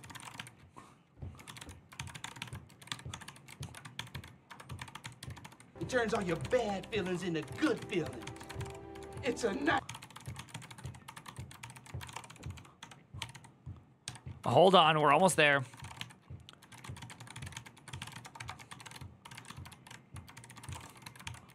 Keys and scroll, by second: 0.0-21.5 typing.